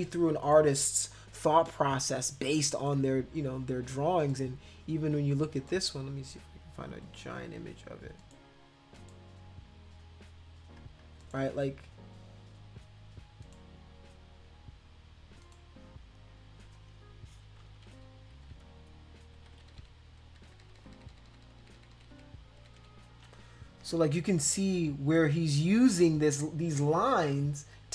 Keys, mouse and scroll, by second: 0.4 click, 2.8 click, 4.2 click, 5.6 click, 8.2 click, 9.0 click, 11.2 click, 12.3-12.6 scroll up 2, 13.4 click, 15.4 click, 17.8 ctrl+=, 18.4 ctrl+=, 18.6 ctrl+=, 19.5 ctrl+=, 19.6 ctrl+=, 19.8 ctrl+=, 20.2 ctrl+-, 20.4 ctrl+-, 20.6 ctrl+-, 20.8 ctrl+-, 20.9 ctrl+-, 21.1 ctrl+-, 21.3 ctrl+-, 21.4 ctrl+-, 21.6 ctrl+-, 21.7 ctrl+-, 21.9 ctrl+-, 22.1 ctrl+-, 22.6 ctrl+=, 22.8 ctrl+=.